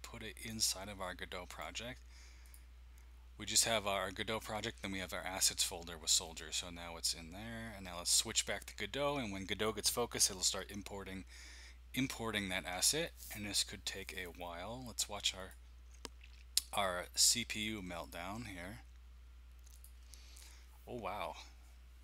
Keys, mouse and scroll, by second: 0.3 click, 2.4-3.9 drag, 6.2-11.1 drag, 15.4-19.1 drag, 19.7-22.0 drag.